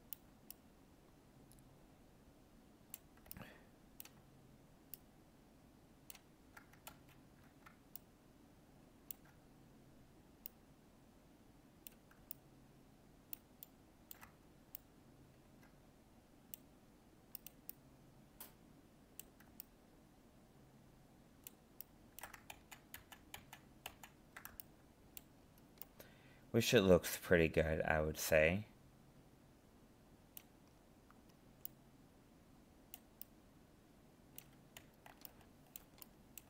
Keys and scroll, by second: 6.9 ctrl+z, 22.5 ctrl+z.